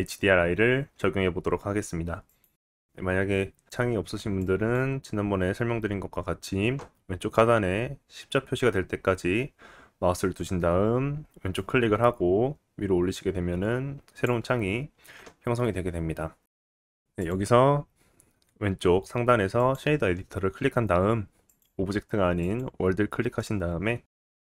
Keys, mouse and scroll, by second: 2.8-4.4 middle drag, 4.4-24.4 drag, 23.4 middle click, 24.2 scroll up 2.